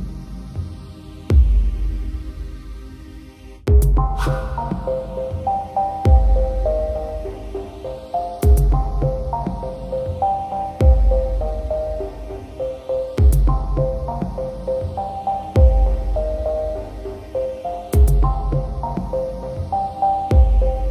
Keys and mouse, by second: 0.4 right click, 1.7 right click, 1.9 right click, 2.5 right click, 4.7 right click, 5.2 right click, 5.7 right click, 6.2 right click, 6.4 right click, 6.9 right click, 7.5 right click, 7.8 right click, 8.4 right click, 8.8 right click, 9.5 right click, 9.9 right click, 10.5 right click, 11.1 right click, 11.6 right click, 12.4 right click, 13.5 right click, 13.7 right click, 14.0 right click, 14.2 right click, 14.6 right click, 15.4 right click, 15.8 right click, 16.4 right click, 16.9 right click, 17.5 right click, 18.2 right click, 18.7 right click, 20.1 right click.